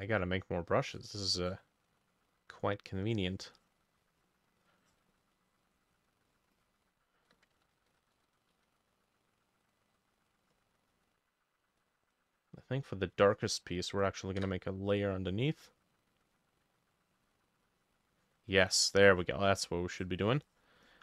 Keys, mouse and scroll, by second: 5.2 double click, 5.4 double click, 5.8 double click, 6.6 double click, 7.6 ctrl+z, 7.8 ctrl+z, 7.9 ctrl+z, 8.2 ctrl+z, 8.6 ctrl+z, 10.5 double click, 10.9 double click, 14.5 Insert, 14.5-21.0 drag.